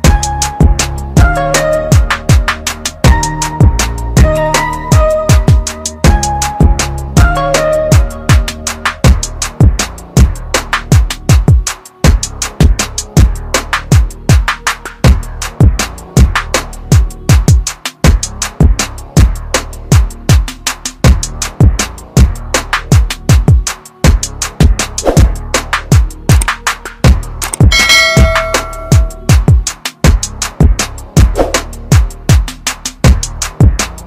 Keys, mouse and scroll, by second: 9.7 click, 12.6 shift+click, 14.6 shift+right click, 17.6 click, 18.9 shift+click, 22.2 shift+right click, 24.0 click, 27.1 scroll up 1, 27.7-28.0 scroll down 1, 28.7 scroll up 1, 30.1 click.